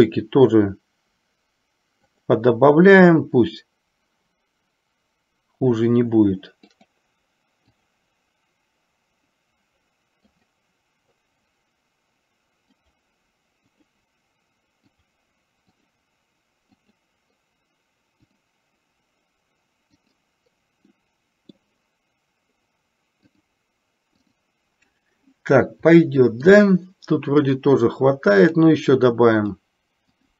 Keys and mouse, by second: 2.3 click, 6.9 click, 7.9 click, 10.5 click, 12.9 click, 13.9 click, 15.2 click, 15.9 click, 17.0 click, 18.5 click, 20.2 click, 21.0 middle click, 23.4 click, 24.4 click, 26.2 middle click, 27.6 click, 28.6 click, 29.6 click.